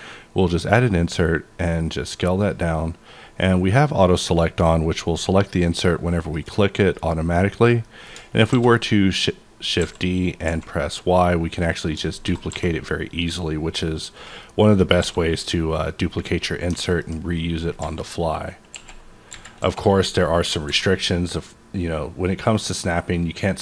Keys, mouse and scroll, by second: 0.3-1.1 scroll down 5, 1.8 scroll up 1, 1.9-2.4 scroll down 2, 2.4 click, 2.9-4.3 scroll up 2, 5.0 scroll up 1, 5.7 click, 5.7-6.2 scroll up 1, 6.2 click, 6.9 click, 7.8 middle click, 8.5 shift+d, 9.8 x, 10.5 y, 11.7 click, 12.3 d, 12.5 z, 14.2 click, 14.4-15.9 middle drag, 15.0 s, 15.9 click, 16.2 scroll down 2, 16.5-18.7 middle drag, 17.8 KP_8, 18.7 KP_1, 19.3 KP_3, 19.6 KP_5, 20.3-20.7 scroll up 2, 20.7 g.